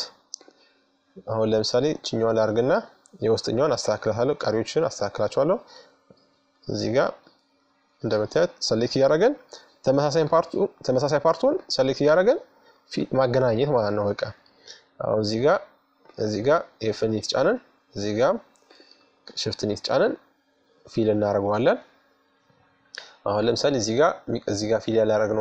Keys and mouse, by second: 1.7 f, 3.5-5.2 right drag, 5.4-6.4 right drag, 6.3 middle click, 6.4 click, 7.2 middle click, 7.6 f, 8.8-11.8 right drag, 11.0 f, 12.0 middle click, 12.5-13.7 middle drag, 13.7-16.3 right drag, 15.2 f, 17.3-20.0 right drag, 19.2 f, 20.5 middle click, 21.4 middle click, 22.6-25.4 middle drag.